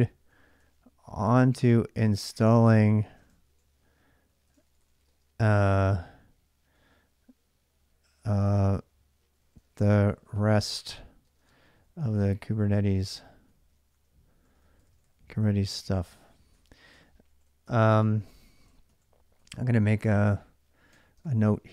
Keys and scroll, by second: 0.0-5.0 typing, 8.9-21.7 typing.